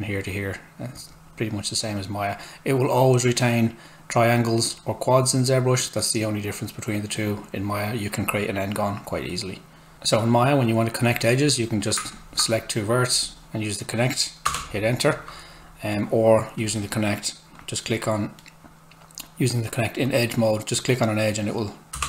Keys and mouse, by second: 4.7 click, 9.9 click, 14.4 Return, 16.6 click, 18.4 right click, 20.0 click, 21.9 Return.